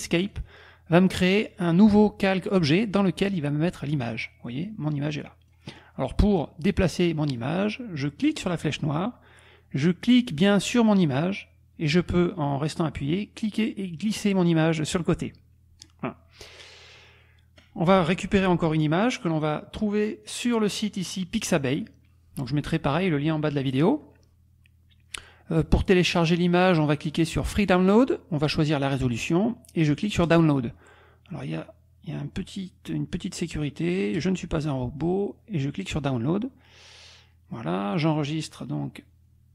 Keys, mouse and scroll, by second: 0.2 click, 4.6 click, 8.3 click, 10.3-16.6 drag, 20.3 click, 21.7 click, 23.0-24.2 drag, 27.5 click, 30.3 click, 34.1 click, 35.8 click, 38.2 click.